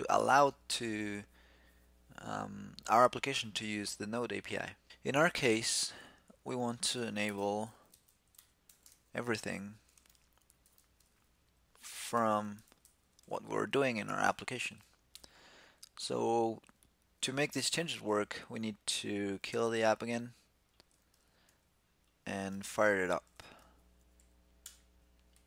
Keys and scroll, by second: 15.0 super+s, 21.0 super+q, 22.8 shift+super+t.